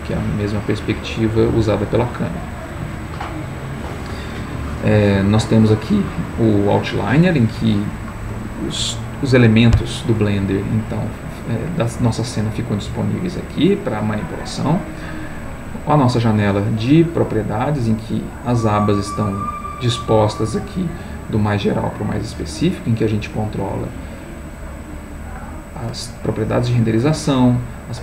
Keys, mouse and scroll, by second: 0.9 middle click, 2.3 middle click, 23.8 click, 27.3 click.